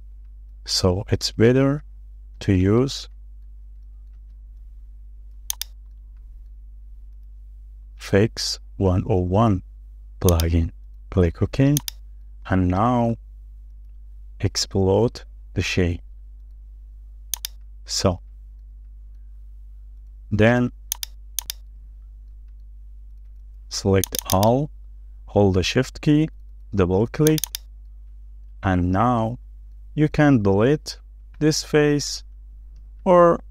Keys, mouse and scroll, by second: 0.0 shift+middle click, 0.3-0.6 scroll up 1, 0.6-0.9 scroll down 1, 0.9 shift+middle click, 2.2 ctrl+z, 2.5 scroll down 1, 3.3-4.0 scroll down 2, 4.0 shift+middle click, 4.5 scroll up 1, 4.8 shift+middle click, 5.0 shift+scroll down 1, 5.1 space, 6.6-6.9 scroll up 1, 6.9 shift+middle click, 8.1 right click, 12.3-12.6 scroll down 1, 12.6 shift+middle click, 13.4-13.7 scroll up 1, 13.7 shift+middle click, 14.7 right click, 18.1 scroll down 1, 18.5 shift+middle click, 19.5 scroll up 1, 19.6 shift+middle click, 21.5 double click, 21.8 scroll down 1, 22.1 middle click, 22.9-23.3 scroll up 1, 23.3 middle click, 23.6-24.2 scroll up 1, 24.2 double click, 25.1 scroll down 1, 27.3 shift+click, 28.5-28.8 shift+scroll down 2, 28.8 middle click, 30.4-30.7 scroll up 1, 30.7 middle click, 32.2 Delete, 32.6-33.5 scroll down 1.